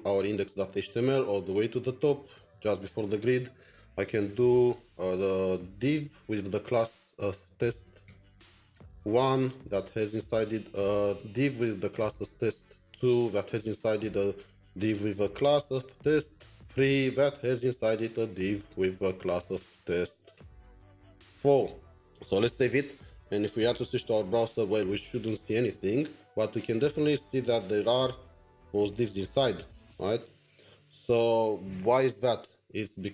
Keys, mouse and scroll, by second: 0.4 typing, 0.5 scroll up 2, 3.2-5.2 scroll up 1, 5.5 Return, 6.6-9.6 typing, 11.1 typing, 12.4-13.4 typing, 14.9-17.4 typing, 21.6 Tab, 22.0 typing, 28.2 typing, 28.4 double click.